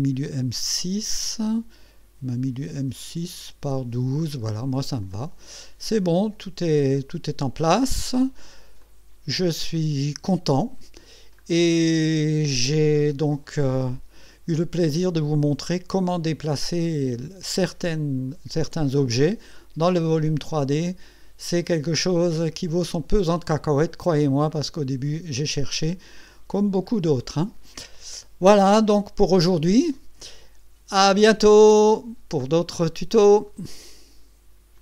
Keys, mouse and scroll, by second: 2.8-3.3 drag, 5.0 click, 5.8 click, 6.0 click, 6.9 click, 7.8-8.4 scroll down 2, 8.8-10.9 drag, 11.5 scroll up 1, 11.9-15.3 scroll down 4, 15.3-18.5 drag, 20.6-24.9 drag, 25.7-26.4 scroll up 2, 26.5 scroll down 1, 27.2 right click, 28.4-30.5 drag.